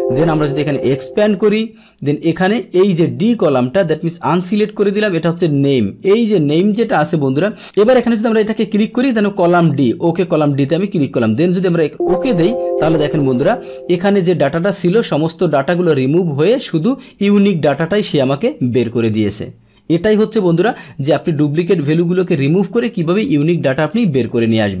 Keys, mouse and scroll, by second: 0.7 click, 1.7 click, 2.2 click, 4.2 click, 7.6 click, 8.3 click, 10.4 click, 11.7 click, 13.2 click, 14.0 middle click, 15.1-16.5 middle drag, 16.5-18.6 drag, 22.3 click, 23.3-24.8 middle drag.